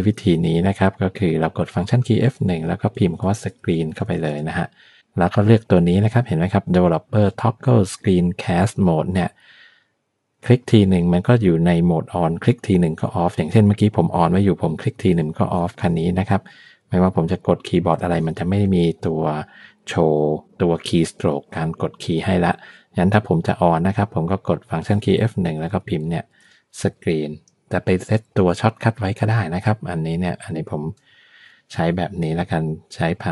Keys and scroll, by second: 2.0 F1, 2.9-4.9 typing.